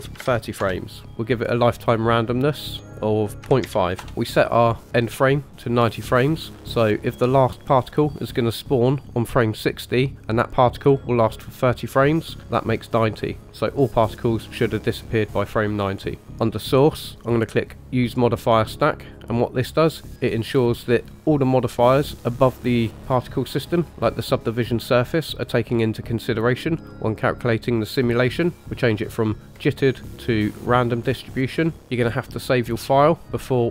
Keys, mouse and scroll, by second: 2.2-4.0 drag, 16.3-17.7 scroll down 1, 17.9 click, 19.5 click, 27.9 click, 28.6-29.3 scroll down 3, 29.5-30.6 drag, 31.5-33.7 scroll down 3.